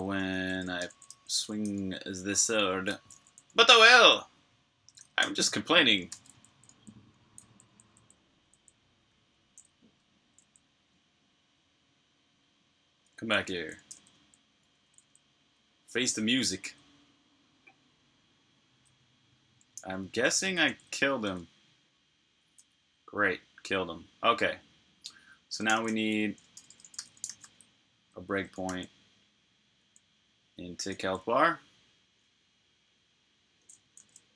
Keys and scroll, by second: 0.6 typing, 4.6-7.5 typing, 8.9 typing, 10.7-11.3 typing, 12.3 typing, 17.8-19.1 typing, 21.2 super+Tab, 25.3-27.8 typing, 28.6 super+j, 34.0-34.3 typing.